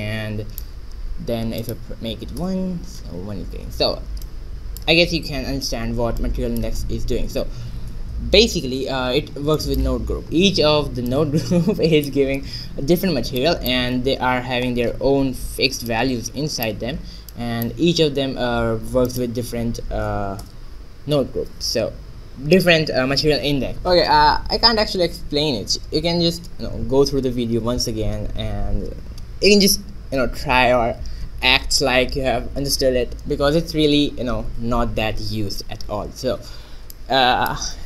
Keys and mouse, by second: 0.1-1.8 middle drag, 2.3-4.0 drag, 4.4-9.6 middle drag, 9.3 Tab, 9.9 middle click, 10.2-11.2 right drag, 11.9-13.5 drag, 14.0 middle click, 14.6 Tab, 19.8-21.5 drag, 37.6 middle click.